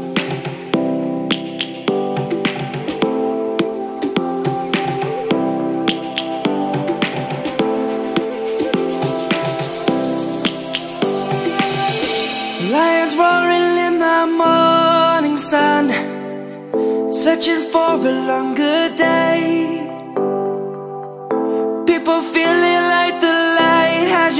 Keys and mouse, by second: 1.1 click, 4.9 s, 9.3 click, 9.5 s, 18.1 ctrl+1, 19.2 middle click, 20.6 s.